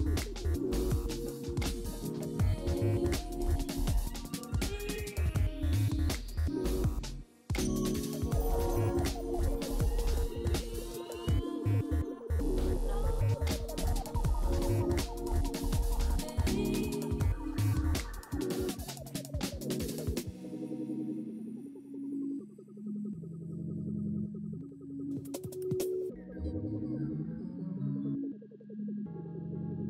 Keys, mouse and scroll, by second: 14.7-15.6 typing, 27.8 3, 27.9 Return, 28.4 2, 28.5 Return.